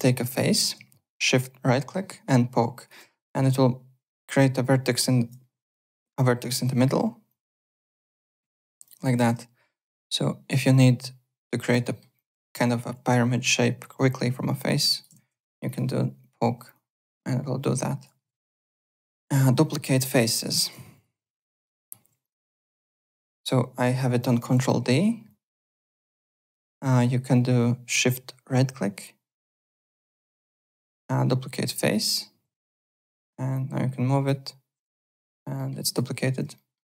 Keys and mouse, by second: 0.0 alt+middle click, 1.2 right click, 4.9 click, 6.6 click, 7.2 click, 7.7 alt+click, 8.7 alt+click, 9.7 shift+right click, 11.8 alt+middle click, 12.1 alt+click, 12.9 w, 13.8 alt+click, 14.4 click, 15.1 ctrl+z, 15.5 1, 15.6 click, 16.2 click, 16.7 click, 18.3 alt+Tab, 19.3 click, 20.3 click, 20.5-21.8 typing, 20.9 click, 21.6 alt+middle click, 22.2 click, 24.2 ctrl+d, 24.5 w, 25.2 click, 26.6 shift+right click, 33.5 click, 34.9 w, 35.2 alt+click, 35.6 alt+middle click, 35.8 alt+click, 36.5 alt+middle click.